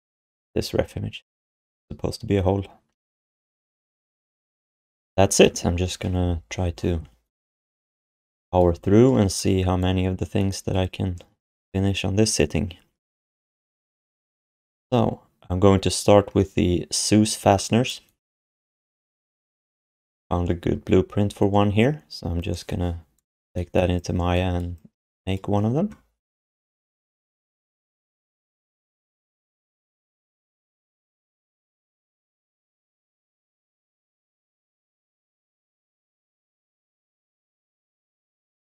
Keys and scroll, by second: 11.5 ctrl+s, 27.3 ctrl+h, 28.2 space, 30.8 ctrl+a.